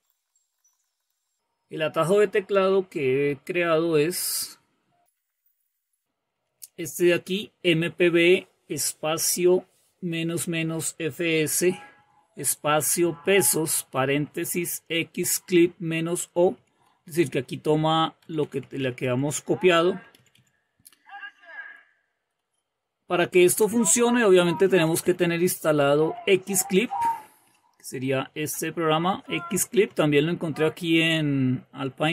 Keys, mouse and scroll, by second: 0.1-1.4 typing, 2.6-3.3 typing, 5.9-8.4 typing, 11.9 Right, 12.3 Right, 12.5 Right, 12.7 Right, 12.9 Right, 13.1 Right, 13.5 Right, 13.7 Right, 13.8 Right, 13.9 Right, 14.2 Right, 16.3 Right, 16.5 Right, 16.7 Right, 16.9 Right, 17.0 Right, 17.2 Right, 17.5 Right, 18.1 BackSpace, 18.3 Left, 18.5 Left, 18.6 Left, 18.9 Left, 20.0 Left, 20.4 Left, 23.4 Left, 24.3 Up, 24.8-30.2 typing, 29.8 Left.